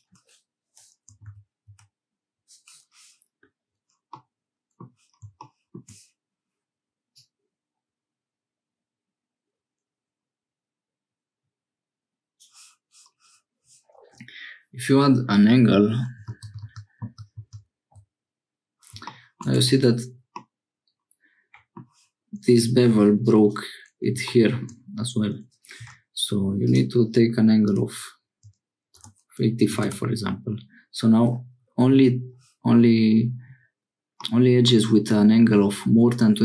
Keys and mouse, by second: 4.1 click, 7.2-12.3 drag, 16.4 ctrl+z, 16.8 ctrl+z, 17.4 ctrl+z, 19.6 Tab, 20.4-21.8 drag, 23.3 click, 26.7-30.5 drag, 34.2 middle click.